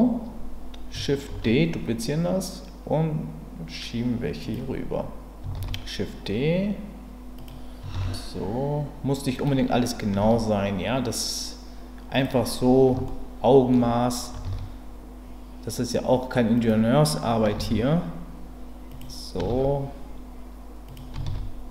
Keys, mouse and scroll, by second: 1.3 shift+d, 4.4 click, 5.5 shift+d, 7.4 click, 9.3 click, 10.2 shift+d, 12.1 click, 13.0 shift+middle click, 14.4 shift+d, 16.5 click, 17.7 shift+d, 18.9 click, 19.5 shift+d, 20.9 click.